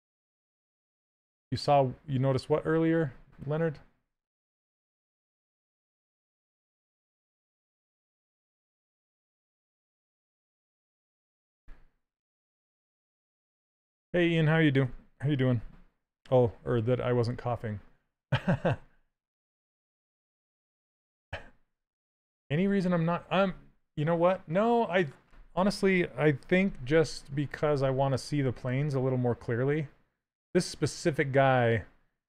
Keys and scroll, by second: 2.6 alt+Tab, 14.5 q.